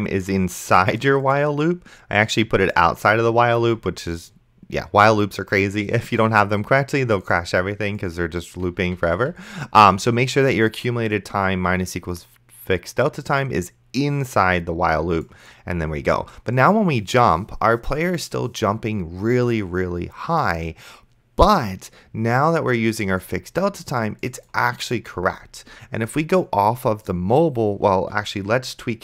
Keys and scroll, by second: 3.6 Tab, 8.9 Tab.